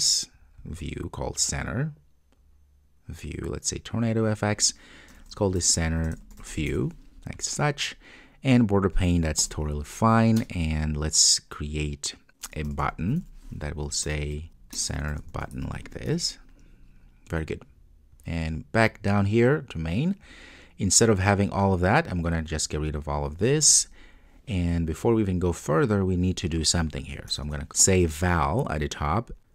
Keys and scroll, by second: 14.1 Return, 16.2 super+s.